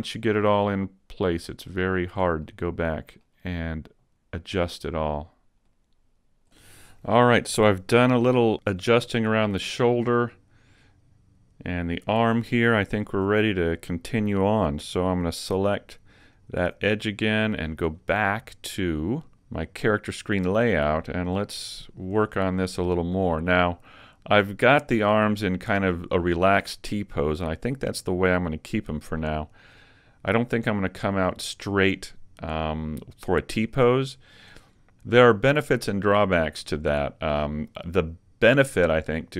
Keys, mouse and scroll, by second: 0.7 click, 2.4 middle click, 2.4 scroll up 1, 3.8 middle click, 6.2 right click, 9.0 middle click, 13.2 Tab, 16.4 alt+right click, 18.0 click, 21.2-22.4 scroll down 4, 22.3 shift+middle click, 23.1-25.1 scroll down 1, 33.6-34.1 scroll down 2, 34.1 shift+middle click.